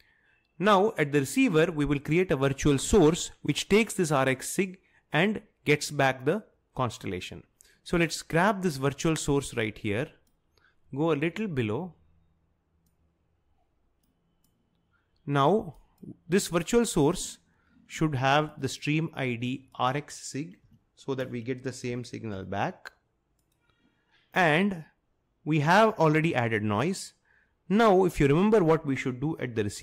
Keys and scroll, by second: 20.7-22.9 typing.